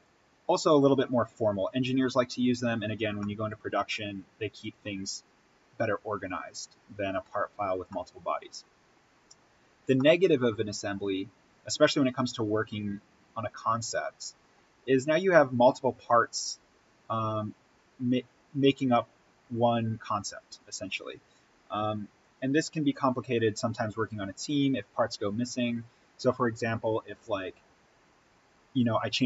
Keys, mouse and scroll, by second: 1.5-3.1 scroll up 1, 3.1-7.2 middle drag, 7.9-16.8 middle drag, 20.3-22.1 scroll up 1, 28.1 click.